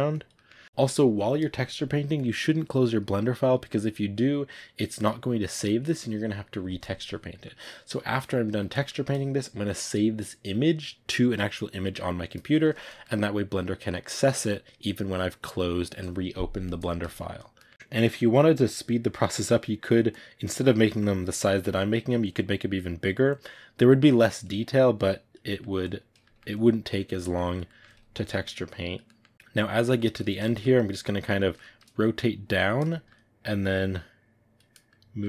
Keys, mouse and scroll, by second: 0.0 click, 0.2-2.0 middle drag, 2.0-7.2 drag, 7.2-14.1 middle drag, 14.1-16.5 drag, 16.5-17.7 middle drag, 17.7 click, 18.1 middle click, 18.6 click, 19.5 middle click, 20.0 click, 20.7-22.1 middle drag, 22.1 click, 22.8 middle click, 23.2 click, 23.8 middle click, 24.1-25.3 drag, 25.3 middle click, 25.7 click, 26.1 ctrl+middle click, 26.4 click, 27.1 middle click, 27.3 click, 27.6 middle click, 28.1 click, 28.9-33.5 middle drag, 33.5-34.7 drag, 34.7 middle click.